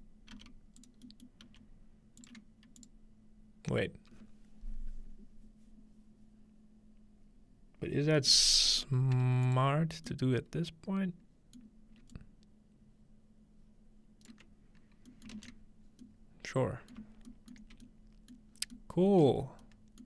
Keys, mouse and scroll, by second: 0.4 g, 0.8 click, 1.0 scroll down 1, 1.5 typing, 2.3 click, 2.8-4.7 drag, 8.2-9.5 scroll up 2, 9.5-11.0 drag, 9.5-10.1 scroll up 1, 12.1-14.3 alt+drag, 15.4 ctrl+alt+space, 17.7 middle click, 18.6-19.2 middle drag, 18.6-19.2 scroll down 2, 19.4 middle click, 19.4-19.7 scroll up 2.